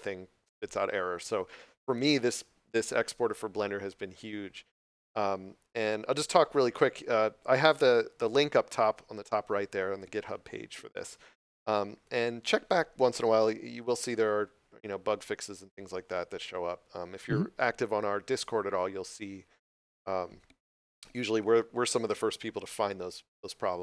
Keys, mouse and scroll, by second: 6.6 scroll up 1.